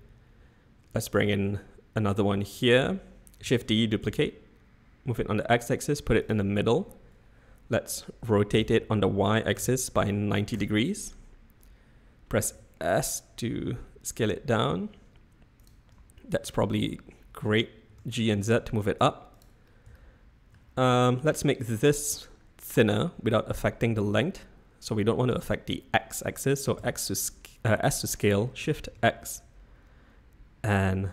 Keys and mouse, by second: 3.4 shift+d, 8.3 r, 12.5 s, 15.9 z, 17.8 g, 20.0 shift+middle click, 26.8 s.